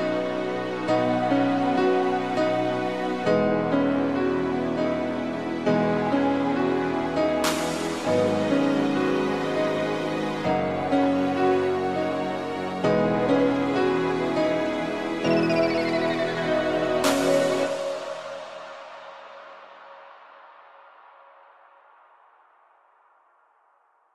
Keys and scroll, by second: 1.5 z, 2.9 space, 9.1 ctrl+0, 9.6 v, 12.7 ctrl+s.